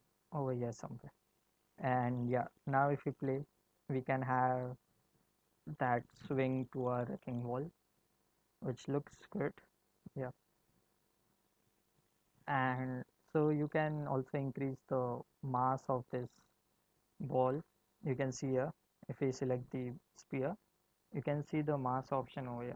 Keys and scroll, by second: 3.2 space, 9.3 space.